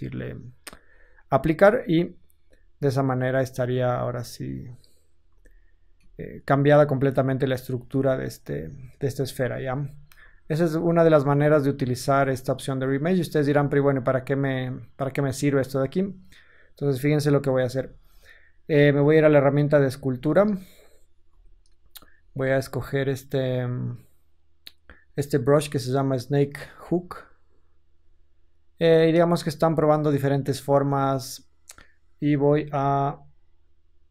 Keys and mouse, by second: 2.2 Tab, 3.6-5.8 middle drag, 7.9 ctrl+z, 8.4 ctrl+z, 8.8 ctrl+z, 9.3-11.4 ctrl+z, 16.4-23.2 drag, 18.8 ctrl+Tab, 21.2 t, 23.6-33.1 drag, 32.3 f, 33.1 middle click, 33.5-34.1 drag.